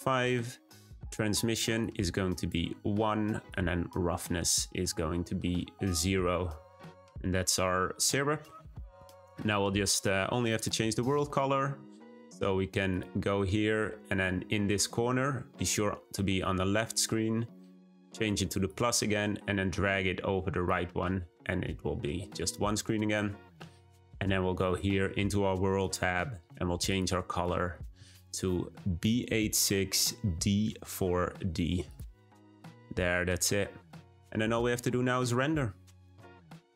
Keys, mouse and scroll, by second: 1.7-15.2 drag, 19.2-21.7 drag, 21.8-23.1 scroll down 1, 23.1 scroll down 1, 23.2-24.6 scroll up 1, 26.1 click, 32.6-33.3 scroll down 1, 33.3-34.6 scroll up 1.